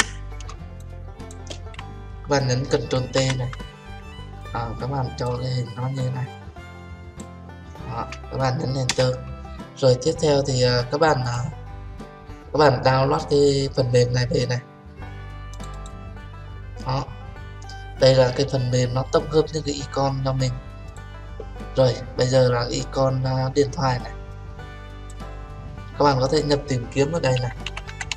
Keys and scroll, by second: 3.1 ctrl+t, 8.9 Return.